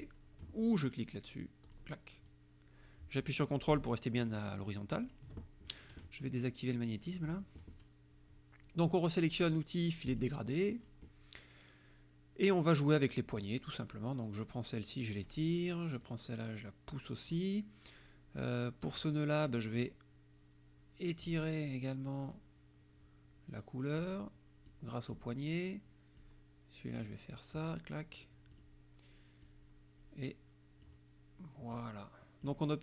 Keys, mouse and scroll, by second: 1.7 click, 2.3-5.3 drag, 7.1 click, 10.1 click, 13.4-15.5 drag, 16.1-17.6 drag, 18.8 click, 19.8-21.4 drag, 22.3-24.2 drag, 24.7 click, 26.3-27.8 drag, 28.6 click, 29.5-31.1 drag, 31.8 click.